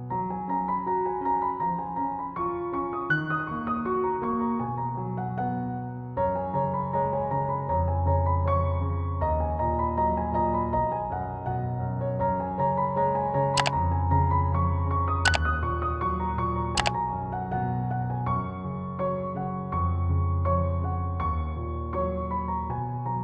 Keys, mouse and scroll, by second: 3.3-12.4 drag, 15.3-16.9 shift+drag, 16.9 click, 19.1-19.6 scroll down 1, 19.6-21.7 drag.